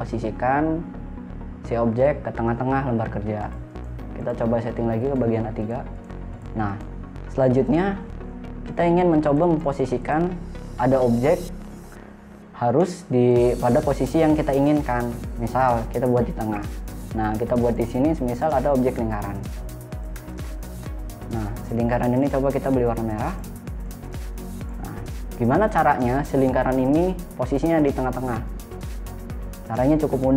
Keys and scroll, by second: 13.1 p, 21.1 space.